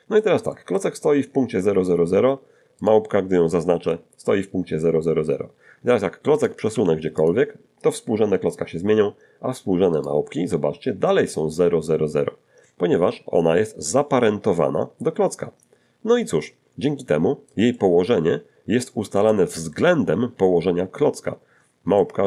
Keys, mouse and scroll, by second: 0.5 middle click, 2.8 right click, 6.4 right click, 6.7 g, 7.2 click, 10.0 right click, 16.4-17.7 middle drag, 22.0-22.2 shift+middle drag.